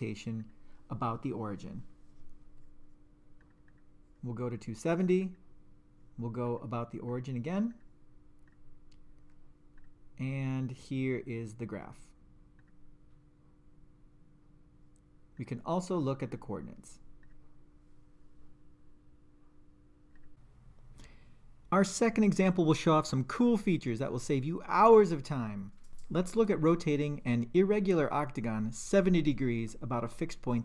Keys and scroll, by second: 0.4 3, 3.4 Down, 5.2 Return, 6.5 0, 7.1 Return, 7.7 0, 8.5 Return, 12.6 2, 15.4 Return.